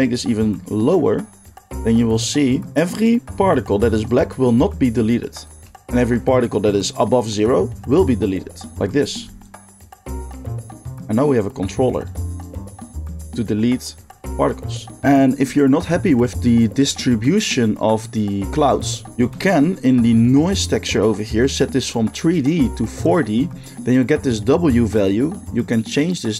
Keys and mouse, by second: 8.7 middle click, 8.7 x, 9.4-26.3 shift+drag.